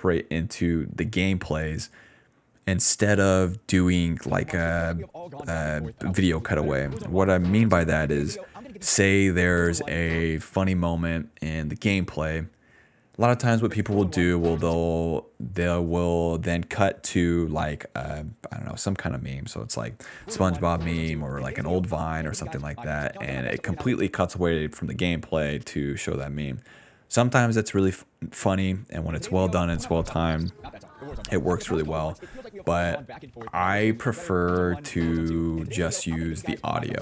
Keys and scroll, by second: 4.0 ctrl+s, 4.1 space, 4.6 d, 5.8 s, 6.2 d, 8.8 space, 9.3 space, 10.1 space, 10.2 d, 13.6 space, 14.7 space, 19.1 s, 19.9 space, 21.2-24.4 typing, 25.7 ctrl+s, 28.9 space, 29.7 d, 30.7 d.